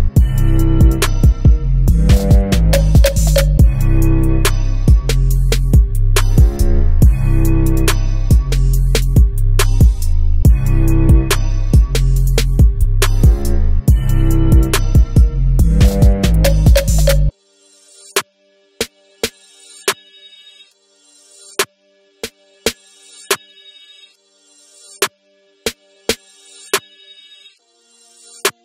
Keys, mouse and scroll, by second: 2.6 click, 3.0 middle click, 4.0 scroll up 2, 4.2-5.5 middle drag, 5.5-5.8 scroll down 2, 5.8-7.5 middle drag, 7.5 Tab, 9.4 click, 13.4 click, 15.6 click, 21.9 click, 25.4 click.